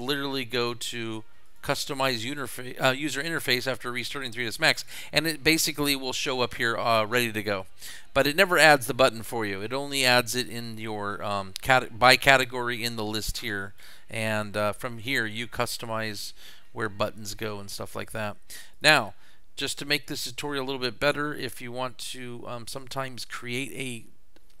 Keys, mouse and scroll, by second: 0.0 click, 1.5 click, 13.6 click, 18.7 click.